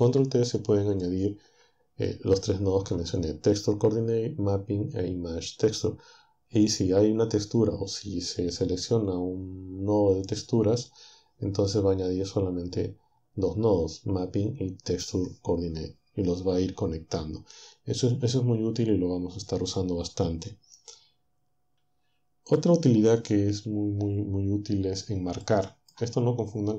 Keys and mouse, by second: 25.4 middle click.